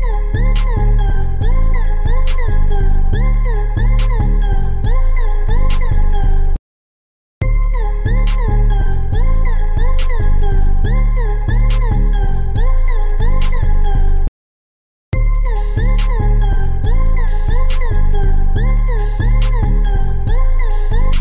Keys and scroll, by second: 0.2 ctrl+z, 1.4 ctrl+e, 1.8 ctrl+e, 2.1 ctrl+e, 2.3 ctrl+e, 6.1 ctrl+z, 18.1 ctrl+e, 18.6 ctrl+e, 18.8 ctrl+e, 19.0 ctrl+e.